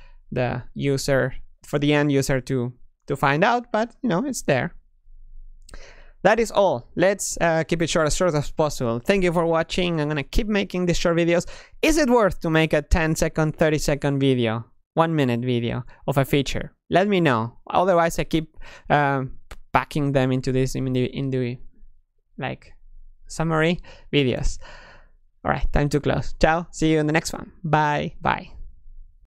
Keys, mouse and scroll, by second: 4.9 click.